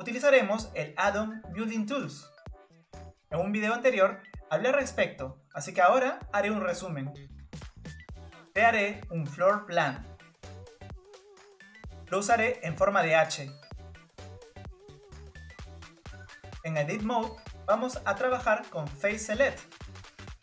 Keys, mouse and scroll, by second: 0.0 click, 1.8-3.2 drag, 3.2 scroll up 2, 5.8-9.0 middle drag, 9.0-11.0 drag, 11.8-14.7 drag, 15.3-17.0 drag, 17.0 Tab, 18.4 click, 19.2 click.